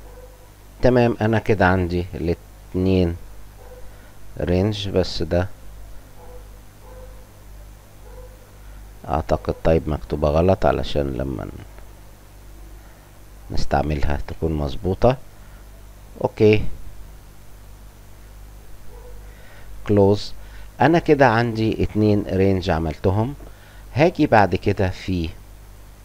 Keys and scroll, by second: 14.2 BackSpace, 15.3 Delete, 15.3 Return.